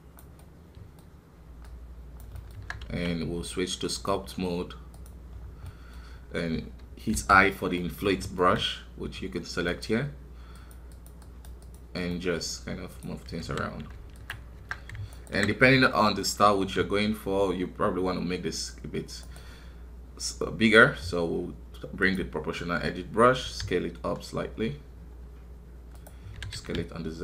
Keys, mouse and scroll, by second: 0.4-2.5 middle drag, 2.5 Tab, 3.9-5.3 drag, 5.3 scroll down 1, 5.6 middle click, 6.1-7.1 scroll up 2, 7.1 i, 7.7 middle click, 8.6-9.7 scroll up 1, 10.5-12.1 drag, 12.1-13.4 middle drag, 13.4 KP_1, 13.9 ctrl+Tab, 15.1-16.6 alt+right drag, 16.6 s, 22.0-23.4 drag, 23.4 s.